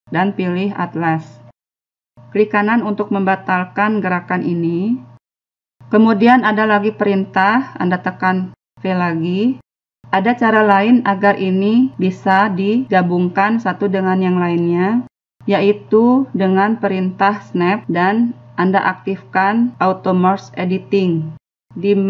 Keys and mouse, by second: 9.0 v.